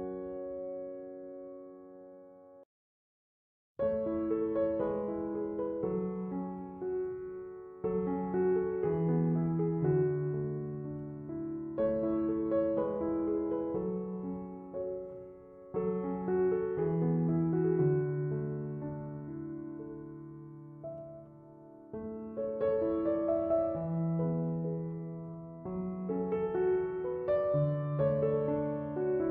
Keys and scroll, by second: 6.4-7.7 typing, 26.5 1, 26.8 Return.